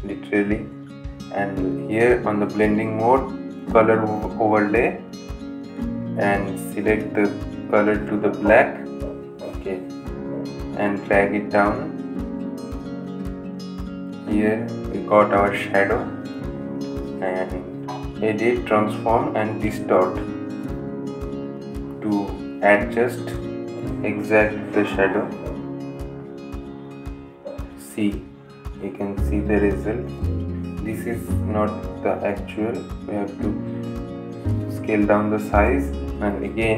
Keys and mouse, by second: 0.6 click, 8.1 click, 11.0 click, 13.5 ctrl+z, 15.1-36.7 drag.